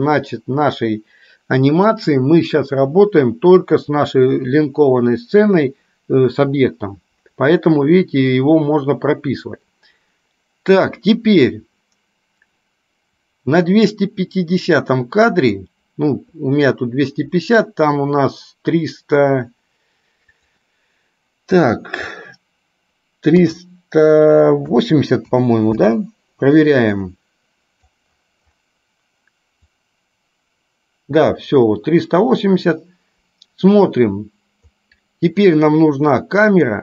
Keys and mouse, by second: 8.6-15.8 drag, 20.6-26.1 drag, 27.2-28.2 drag, 29.8-34.8 drag, 36.7 click.